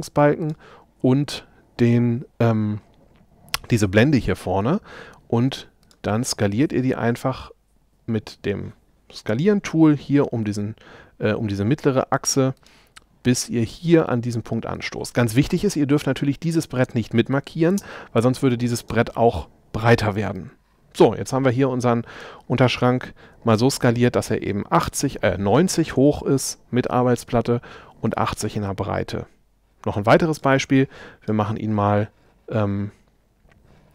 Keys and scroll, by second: 17.7 space.